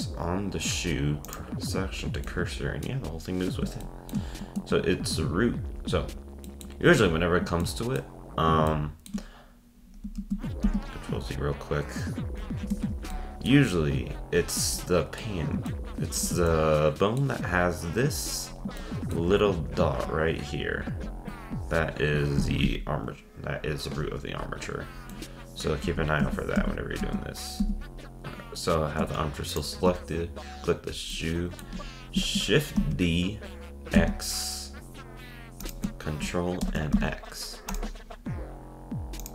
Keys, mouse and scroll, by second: 2.3-3.0 middle drag, 3.0-3.8 scroll down 1, 3.8 scroll down 1, 3.8-4.6 shift+middle drag, 4.6 ctrl+Tab, 5.1-6.4 scroll up 8, 6.4 scroll up 2, 6.5 middle click, 6.8-7.6 scroll down 1, 7.6-10.1 shift+middle drag, 10.2 z, 10.7 z, 12.7 ctrl+Tab, 13.1-13.8 middle drag, 13.8-14.7 scroll up 3, 14.7-16.2 middle drag, 16.2 scroll down 1, 16.5-17.3 middle drag, 17.3-18.2 scroll up 1, 18.2-18.8 scroll up 2, 18.8-21.8 shift+middle drag, 23.6-25.1 scroll down 15, 25.1-25.7 middle drag, 25.9-27.6 typing, 28.1-29.5 middle drag, 29.5 shift+click, 31.1-32.8 middle drag, 32.8 shift+d, 36.6 ctrl+m, 39.2 click.